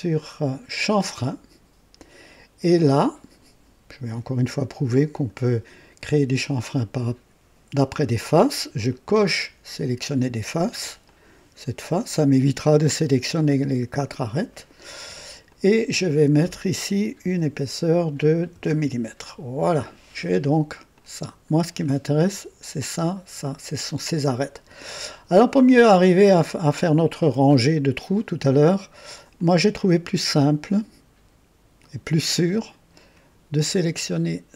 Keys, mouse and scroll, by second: 0.7 click, 5.1 click, 8.8 click, 11.0 click, 15.4 click, 17.2 KP_2, 18.5 Return, 20.9-21.9 drag, 24.8 scroll up 1, 25.3-26.1 right drag, 29.3 click, 31.8 ctrl+click, 33.1 ctrl+click.